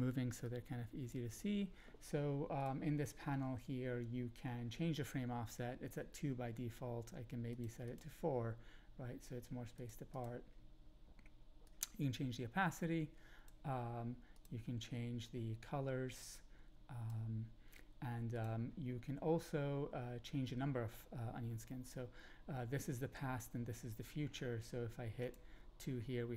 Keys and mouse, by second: 2.5-17.3 drag, 18.4-25.9 drag.